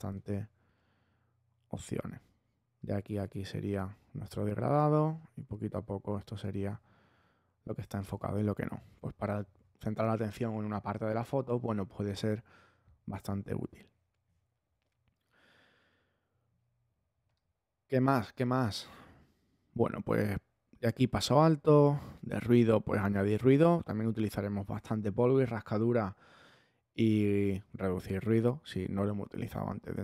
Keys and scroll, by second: 14.2 ⟲.